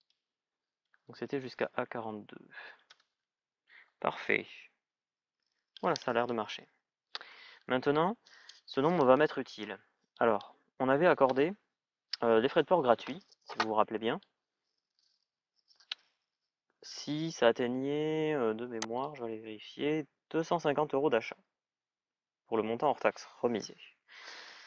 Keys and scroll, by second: 0.9 Delete, 2.2 shift+é, 2.6 Return.